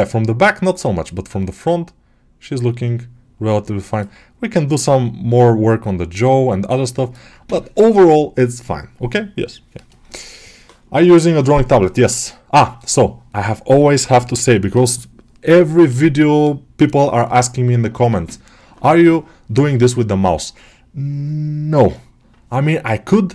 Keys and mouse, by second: 4.6-7.1 alt+middle drag.